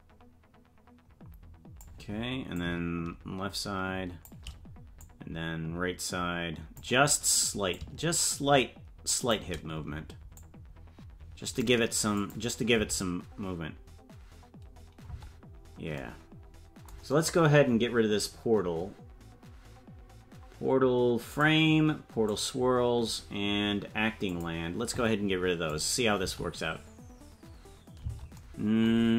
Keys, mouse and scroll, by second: 2.5-4.3 drag, 5.0-6.8 drag, 7.7-9.4 drag, 10.3-11.6 drag, 12.1 click, 12.7 space, 14.7-15.9 scroll down 3, 15.0 space, 21.3 click, 22.2 click, 24.3 click, 25.7 click, 26.2 space, 28.3 space.